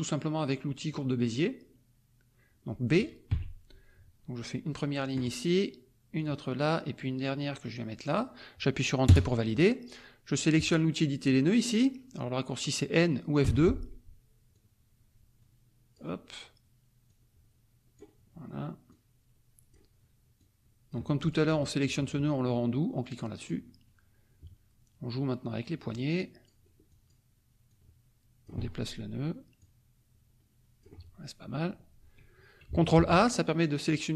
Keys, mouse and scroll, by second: 3.3 b, 5.1 click, 6.1 click, 8.0 click, 9.0 Return, 13.4 F2, 14.5-16.1 drag, 17.0-18.1 drag, 18.8-19.9 drag, 20.3 click, 21.2 click, 23.4 click, 25.6 click, 26.8 click, 27.6 click, 29.6-31.7 drag, 32.9 ctrl+a.